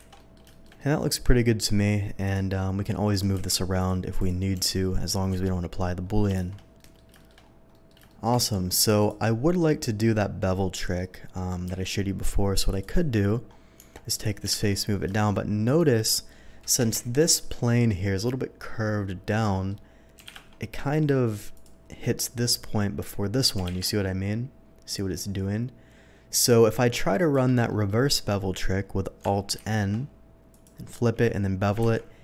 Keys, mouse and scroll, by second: 0.1 alt+a, 0.1 middle drag, 0.5 shift+middle drag, 0.8-1.6 middle drag, 2.2 shift+click, 2.5 shift+middle drag, 3.1 shift+click, 3.4 q, 3.7 click, 4.2 click, 4.6 g, 5.3 Escape, 6.1 middle drag, 6.3 shift+2, 6.7 middle drag, 7.1 shift+middle drag, 7.7 shift+middle click, 8.0 shift+middle drag, 8.4 shift+middle click, 9.0 shift+click, 9.3 shift+scroll down 1, 9.6-10.0 shift+middle drag, 10.7 shift+middle drag, 11.3 middle click, 11.7 q, 12.6 click, 12.8 click, 13.7 Tab, 14.1 click, 14.4 g, 14.5 z, 15.6 shift+click, 16.1 middle click, 16.7 KP_3, 17.2 shift+middle click, 19.4 shift+middle click, 20.2 g, 20.4 shift+z, 21.5 click, 23.5 g, 23.6 z, 27.2 shift+click, 27.6 shift+middle click, 29.5 alt+n, 30.5 click, 31.8 ctrl+b.